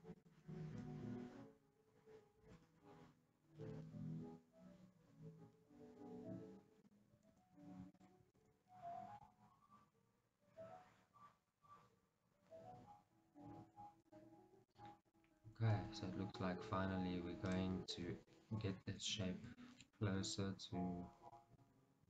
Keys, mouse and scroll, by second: 0.3 click, 0.8 g, 7.1 right click, 7.5 shift+z, 8.1 shift+click, 8.5 shift+z, 9.4 g, 14.2 click, 15.2 click, 15.6 g, 17.7 click, 19.5 scroll, 19.7-22.0 shift+middle drag, 20.1 scroll.